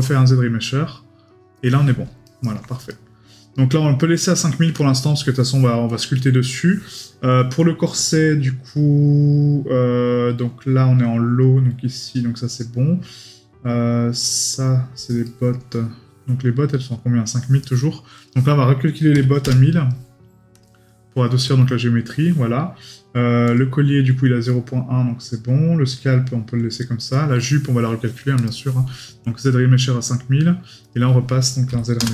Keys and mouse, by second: 2.2 right click, 7.0 right click, 15.2 right click.